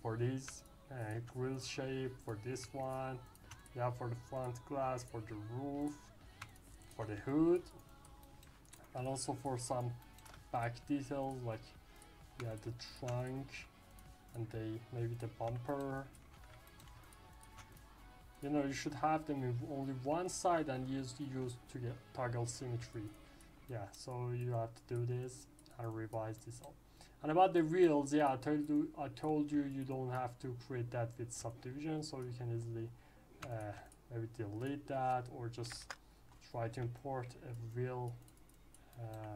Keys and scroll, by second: 35.6 Delete, 35.7 Return.